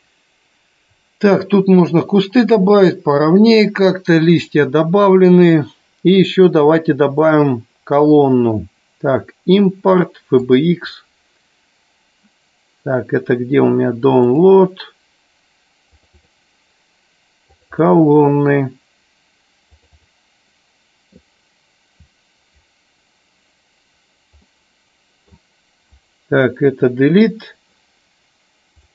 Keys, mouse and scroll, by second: 7.3-10.9 drag, 24.5 middle click, 26.7 Delete, 28.8-28.9 drag.